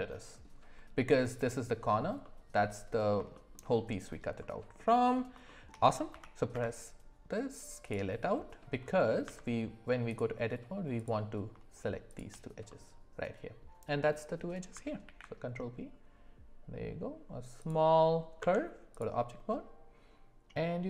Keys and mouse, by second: 2.2 middle click, 3.3 shift+middle drag, 4.4 middle click, 5.4 shift+middle drag, 6.1 s, 8.3 middle click, 9.2 Tab, 10.9 click, 12.1 shift+click, 12.7 middle click, 15.0 ctrl+b, 18.4 Tab.